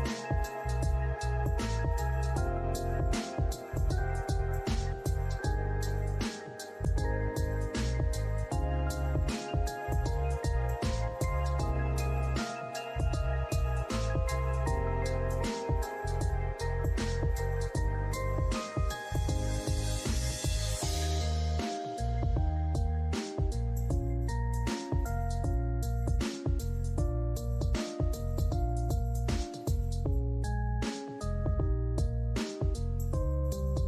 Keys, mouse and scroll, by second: 0.3-1.0 typing, 1.0 scroll down 1, 1.4 alt+click, 2.6 alt+scroll down 1, 3.0 alt+middle click, 3.3 alt+click, 5.2 scroll up 1, 5.6 alt+middle click, 6.4 alt+click, 8.8 double click, 9.6 alt+middle click, 10.0 alt+click, 10.5 alt+middle click, 11.5 ctrl+click, 17.5 alt+click, 18.1 alt+middle click, 18.5 alt+click, 19.4 right click, 21.0 double click, 21.4 right click, 22.6 double click, 23.7 ctrl+z, 25.1 typing, 25.3 Return, 26.1 ctrl+z, 28.2 right click, 29.6 alt+middle click, 30.0 alt+click, 32.7 double click, 33.4 shift+click, 33.5 shift+double click.